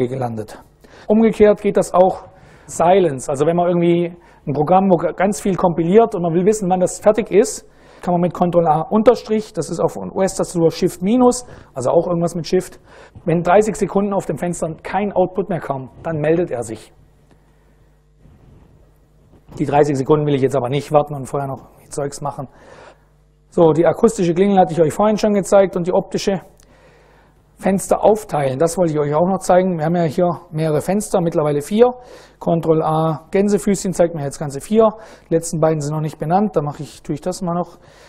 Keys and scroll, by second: 29.8 super+Right, 32.3 ctrl+a, 33.0 shift+', 33.5 shift+Up, 33.8 shift+Up, 34.0 shift+Up, 34.5 shift+Down, 36.0 Up, 37.3 Return.